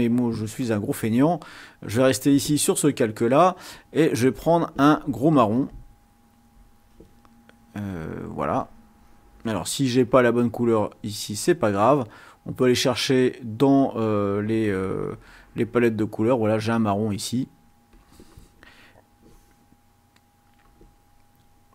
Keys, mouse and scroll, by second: 1.2 click, 5.6 click, 10.2 click, 11.4 click, 12.3 click, 14.2 click, 14.8 click, 16.5 click, 17.9 click, 20.7 click.